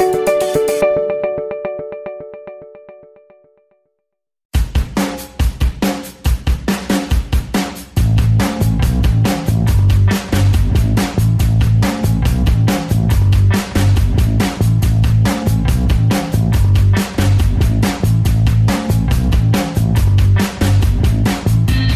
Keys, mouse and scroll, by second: 1.8 alt+middle click, 1.9 alt+right click, 2.1 alt+click, 2.7 alt+right click, 2.8 alt+click, 2.9 alt+middle click, 3.1 alt+right click, 3.3 alt+click, 3.6 alt+middle click, 4.0-5.2 ctrl+alt+drag, 5.2 ctrl+z, 5.3 alt+click, 5.5 alt+right click, 5.6 alt+click, 5.7 alt+middle click, 5.8 alt+right click, 6.0-7.1 alt+shift+drag, 7.1 alt+right click, 7.2 alt+click, 7.3 alt+middle click, 7.4 alt+click, 7.9 alt+right click, 8.0 alt+click, 8.2 alt+right click, 8.7 shift+b, 8.9 alt+click, 9.0 f, 9.1-10.2 drag, 10.5 alt+middle click, 10.8 click, 11.6 alt+middle click, 11.7-13.5 drag, 13.5 f, 13.7-15.8 drag, 15.8 alt+m, 15.9 alt+click, 16.1 alt+right click, 16.2-17.7 alt+drag, 17.7 alt+right click, 17.8 alt+click, 17.9 f, 18.0 alt+click, 18.7 alt+middle click, 18.8 alt+right click, 18.9 alt+middle click, 19.2 shift+click, 20.0 ctrl+z, 20.1 alt+middle click, 20.2 alt+click, 20.4 g, 20.5 f, 20.6 f, 20.8 click, 21.4 alt+middle click, 21.6 f, 21.7-21.9 drag.